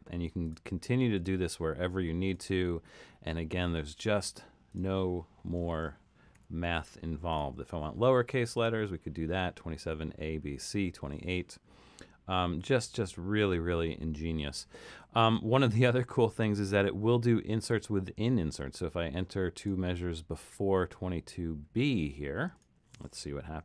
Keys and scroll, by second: 6.4 3, 13.0 super+z.